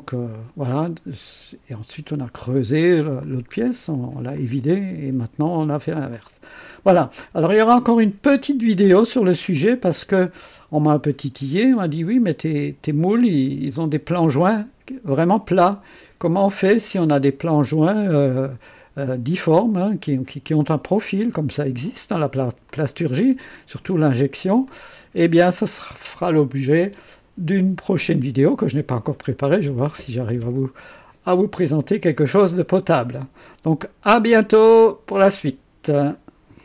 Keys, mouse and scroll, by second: 3.2-3.9 drag, 4.3-5.7 drag, 6.1 click, 7.5-9.1 drag, 9.5 click, 10.4-11.7 drag, 13.7 click, 15.2-17.1 drag, 21.3 click, 22.6 click, 24.6-25.5 drag, 29.9-31.1 drag, 31.6 click, 35.0 right click, 36.5 click.